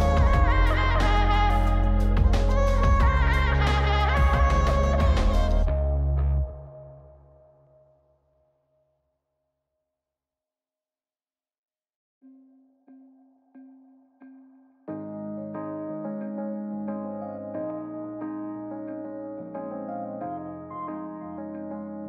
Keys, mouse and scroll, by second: 0.8 click, 2.6 click, 3.7 click, 4.1 scroll down 2, 4.4-5.1 middle drag, 6.2 click, 6.8 click, 7.4 click, 7.9 click, 8.5 click, 9.0 click, 10.8-13.8 drag, 14.0 click, 15.3 click, 16.8 click, 17.2 middle click, 19.8 click, 20.3 click, 20.7 middle drag, 21.9 click.